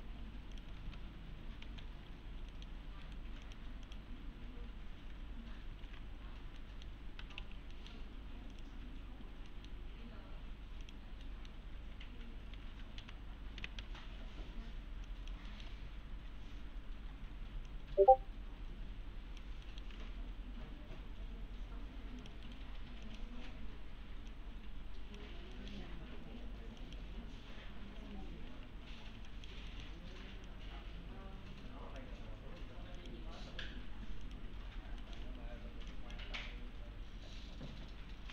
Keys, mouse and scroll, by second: 0.0 scroll up 1, 0.5 click, 0.8 alt+s, 1.7 alt+x, 2.1 scroll down 1, 2.5 middle click, 3.1 right click, 3.5 click, 5.2-5.7 scroll up 1, 5.9 alt+q, 6.6 middle click, 7.0-7.9 typing, 7.7 middle click, 8.5 click, 9.5 middle click, 10.8 click, 11.3 middle click, 12.5 1, 13.0 s, 13.7 s, 15.1 click, 15.5 middle click, 15.8-17.6 scroll up 1, 17.7-19.5 click, 19.7 middle click, 20.0 alt+1, 22.2 click, 22.5 right click, 22.7-23.1 scroll up 1, 23.1 click, 25.6 middle click, 25.9-26.8 scroll down 1, 26.8 click, 27.2-28.0 scroll down 1, 28.0 1, 28.5 1, 29.3 ctrl+click, 29.7 middle click, 30.5-32.0 click, 32.1 1, 33.0 click, 34.7 scroll down 1, 35.0 middle click, 35.2 1, 35.5 scroll down 1, 35.9 click, 36.4-37.4 scroll up 1, 37.4-38.3 click, 38.1 s.